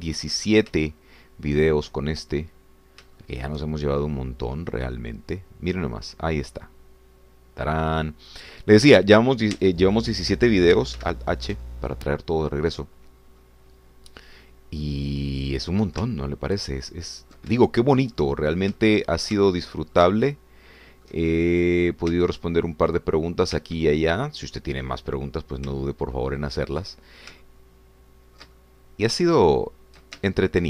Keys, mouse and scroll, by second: 1.1 shift+scroll up 1, 1.2-3.0 shift+drag, 3.0 shift+scroll up 1, 3.1-3.8 shift+scroll down 3, 4.2 shift+click, 4.8-5.8 shift+scroll down 5, 5.9-9.7 drag, 10.6 Tab, 12.0 alt+h, 13.9-14.3 scroll down 2, 14.4-16.8 drag, 17.1-18.5 ctrl+drag, 18.6-20.4 ctrl+shift+drag, 20.5 ctrl+shift+click, 21.0 ctrl+shift+middle click, 21.2-22.2 ctrl+shift+middle drag, 22.5 shift+click, 23.1 Tab, 24.6 Tab, 25.2-25.7 scroll down 1, 25.9 click, 26.8-28.0 ctrl+drag, 28.4-30.6 ctrl+drag.